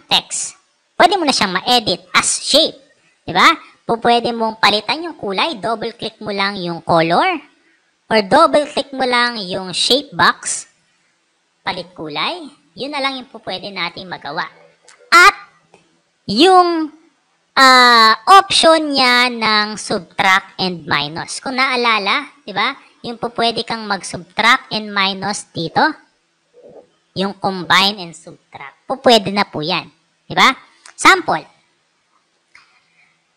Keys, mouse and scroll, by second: 5.7 click, 5.9 click, 8.1 click, 10.6 click, 10.7 click, 11.7 click, 12.4 click, 18.0 click, 18.4 right click, 23.5 click, 24.8 click.